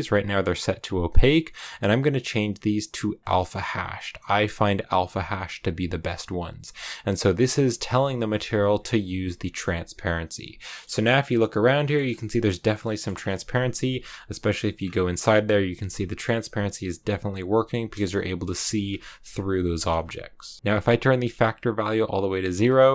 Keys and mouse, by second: 1.2-3.3 drag, 4.5-5.6 drag, 7.8 click, 10.2 click, 10.5 middle click, 10.9 middle click, 12.1 middle click, 13.7 middle click, 15.1-16.1 middle drag, 16.9 middle click, 18.3 KP_0, 18.5 middle click, 19.6 middle click, 20.6-22.9 drag.